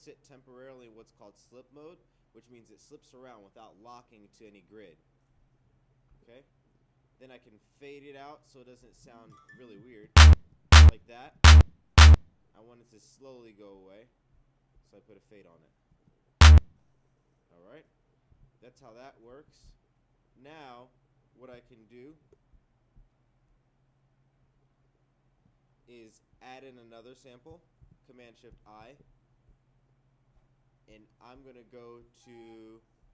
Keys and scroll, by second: 27.8 shift+super+i.